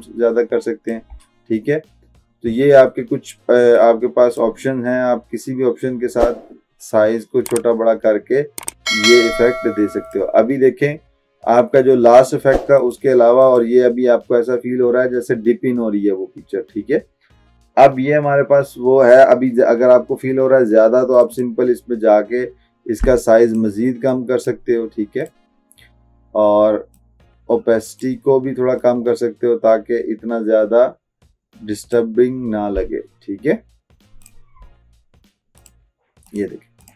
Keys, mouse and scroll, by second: 4.2 drag, 13.0 click, 13.5 click, 15.0 typing, 21.2-28.9 drag, 21.4 typing, 29.2-32.3 drag.